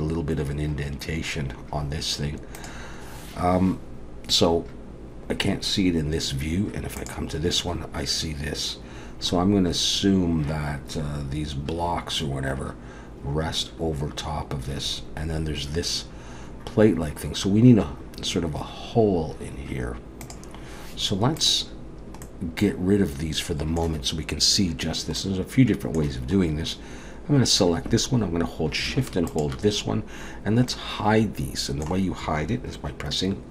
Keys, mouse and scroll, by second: 21.4 click, 22.2 middle click, 25.2 middle click, 26.4-28.2 scroll up 2, 29.3 shift+click, 30.7 middle click.